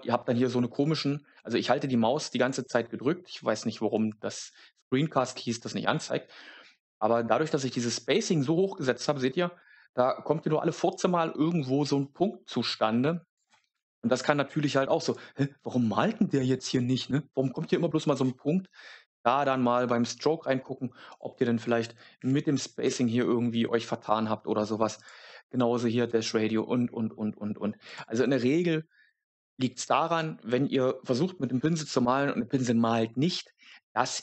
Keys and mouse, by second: 15.0 click, 21.1-22.8 drag, 27.8 click.